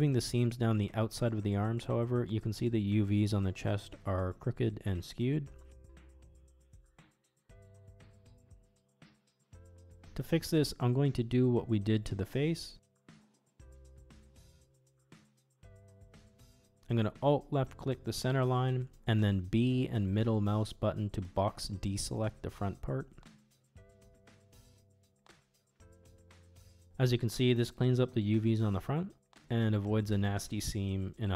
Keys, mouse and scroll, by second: 0.4 middle click, 1.0 middle click, 1.8 alt+click, 2.3 ctrl+e, 4.3 Tab, 5.1 click, 5.8-9.3 middle drag, 9.5 click, 9.8 Tab, 11.3-12.3 middle drag, 12.7 click, 13.3 middle click, 14.2-16.7 middle drag, 16.8 ctrl+z, 17.2 alt+click, 18.0 middle click, 19.1 middle click, 19.9 click, 20.9 b, 25.9 ctrl+e, 27.6 middle click, 28.3 shift+middle click, 28.9 middle click, 30.3 shift+click, 31.0 middle click.